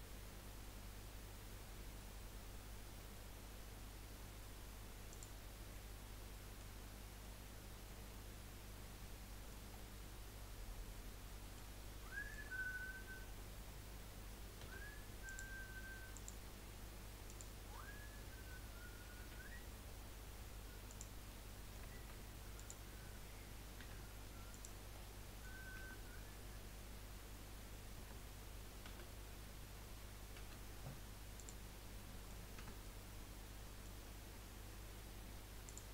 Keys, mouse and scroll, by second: 5.7-6.8 middle drag, 6.8-7.2 scroll up 1, 7.2-9.7 middle drag, 9.7 scroll down 1, 9.9-11.9 middle drag, 11.9 scroll up 1, 12.1-14.6 shift+middle drag, 14.6 1, 15.2 click, 16.1 click, 17.3 click, 19.2 g, 21.3 middle click, 22.0 shift+scroll up 1, 22.5 click, 23.8 g, 24.9 middle click, 25.8 Tab, 28.0 Tab, 28.9 a, 30.4 F3, 32.0 middle click, 32.5 Tab, 32.8-35.9 middle drag.